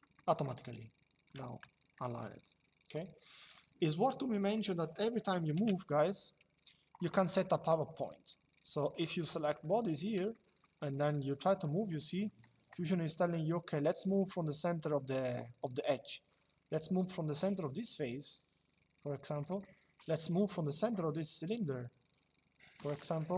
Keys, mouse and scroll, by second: 0.1 shift+middle click, 2.7 click, 4.2 click, 5.2 m, 8.6 click, 10.0 shift+middle click, 11.7 middle click, 23.0 middle click.